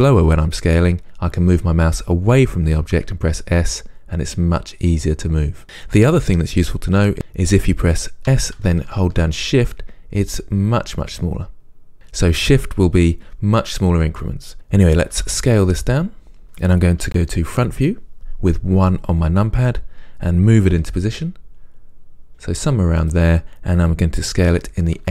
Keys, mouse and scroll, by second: 3.2 s, 5.6 right click, 8.5 s, 11.9 shift+click, 15.3 s, 17.7 KP_1, 20.9 g, 23.2 click, 24.6 s.